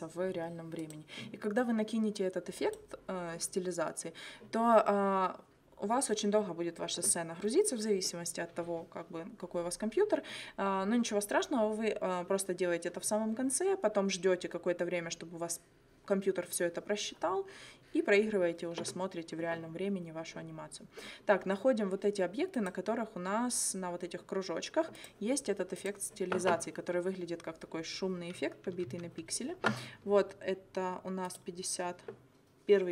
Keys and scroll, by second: 28.7 u.